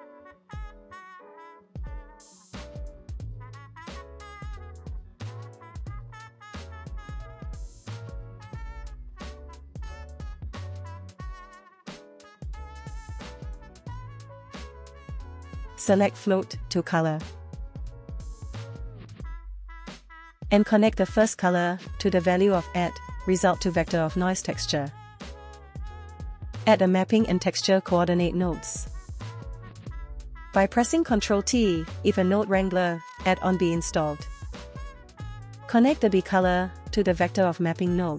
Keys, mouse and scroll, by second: 10.3 click, 14.6 click, 21.2 click, 22.4-23.3 drag, 24.9-25.6 drag, 27.6 click, 28.5 ctrl+t, 31.1 g, 33.0 click, 36.6-38.0 ctrl+drag.